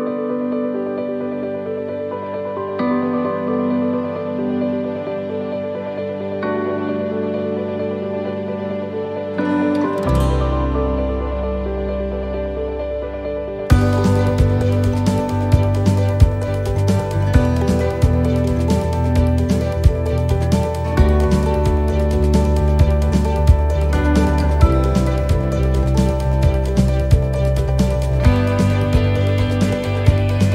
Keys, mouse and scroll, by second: 0.8 middle click, 1.8 shift+right click, 2.5 middle click, 5.1 shift+d, 6.9 scroll down 1, 8.1 g, 14.0 click, 15.8 a, 17.1 click, 21.4 click, 22.6 middle click, 25.2 s, 27.3 middle click.